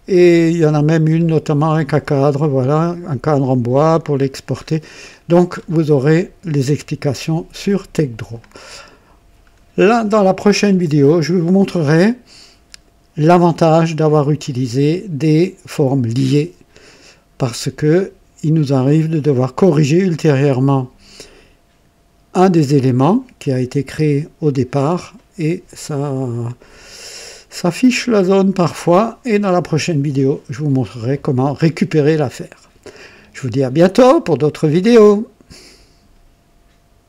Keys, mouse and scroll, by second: 1.1-1.4 scroll down 1, 1.5 typing, 3.8-4.3 scroll down 1, 4.5-5.8 scroll up 3, 4.9 typing, 8.1 click, 8.3-9.3 typing, 9.3 scroll down 1, 10.6-11.6 drag, 18.5 click, 36.1 click, 36.3 right click, 37.0 click.